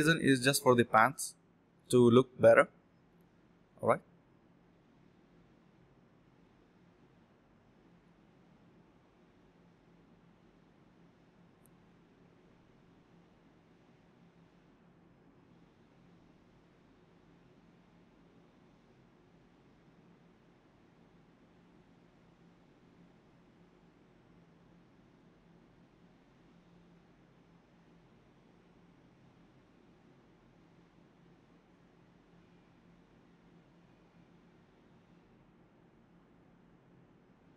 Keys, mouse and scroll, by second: 0.1-1.0 typing, 1.0 alt+click, 1.4 alt+click, 2.2-3.2 typing, 3.8 double click, 4.8 space, 5.6 double click, 8.3 alt+click, 9.2 double click, 12.5 shift+click, 16.4 alt+click, 18.9 alt+click, 19.0 alt+click, 21.1 alt+click, 21.2 alt+click, 21.5 alt+click, 22.0-22.7 typing, 23.0 ctrl+shift+click, 23.2 ctrl+z, 23.3 ctrl+shift+click, 24.3 ctrl+shift+q, 24.7 f, 30.5 ctrl+click, 31.7 ctrl+click, 34.1 ctrl+click, 35.9 ctrl+click, 36.3 ctrl+z, 36.4 ctrl+z, 36.8 ctrl+click, 37.4-37.5 typing.